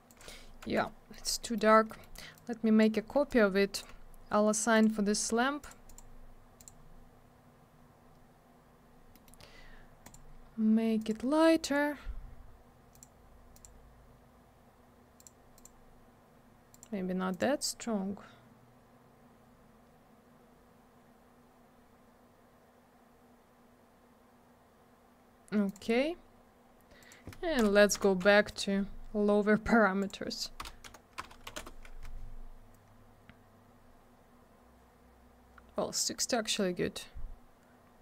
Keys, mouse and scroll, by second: 0.1 click, 0.2 click, 1.4 middle click, 1.5 middle click, 1.7 scroll down 1, 1.9 middle click, 2.0 middle click, 2.4 click, 3.3 shift+click, 4.7 click, 4.8 click, 5.6 click, 5.7 click, 5.9 click, 6.0 click, 6.6 click, 6.7 click, 9.1 middle click, 9.3 middle click, 9.4-10.0 scroll up 1, 10.0 click, 10.1 click, 11.0 click, 11.1 click, 12.9 click, 13.0 click, 13.5 click, 13.6 click, 15.2 click, 15.5 click, 16.7 click, 17.3 click, 25.7 click, 25.7 click, 27.0 click, 27.1 click, 27.6 BackSpace, 28.0 6, 30.0 click, 30.1 click, 30.6 BackSpace, 30.9 7, 31.2 BackSpace, 31.5 6, 31.6 Return, 32.8-33.8 scroll up 1, 33.8-35.0 scroll down 1, 36.5 scroll up 1, 37.0 scroll down 1, 37.9-38.0 scroll up 1.